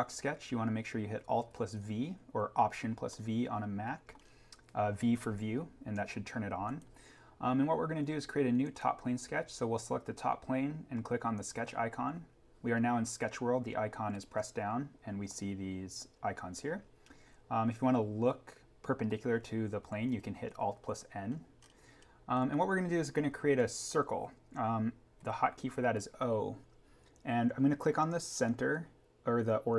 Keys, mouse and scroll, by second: 0.7-1.4 scroll down 1, 2.5-2.9 scroll down 1, 3.1-10.9 middle drag, 11.3 click, 20.4 click, 20.8 alt+n, 21.5 scroll up 1, 24.2 scroll down 1, 25.1-27.2 scroll down 1.